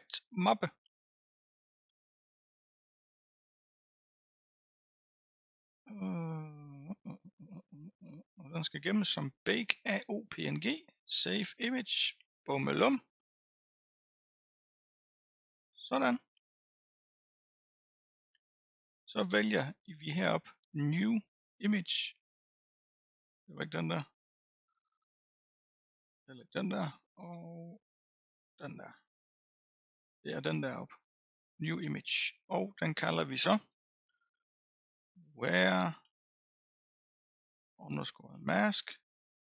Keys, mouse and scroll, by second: 22.0-25.1 drag, 25.5-26.5 drag, 27.4-29.8 drag, 31.1-34.2 drag, 34.7 BackSpace.